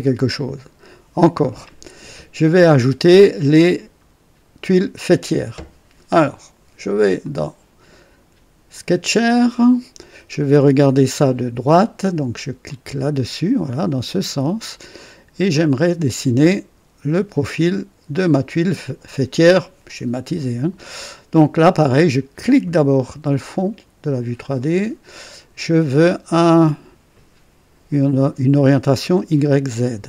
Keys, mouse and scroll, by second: 7.1 click, 8.6 click, 12.6 click, 14.3 scroll up 2, 14.9-15.6 right drag, 15.7 scroll up 2, 22.3 click, 24.5 click.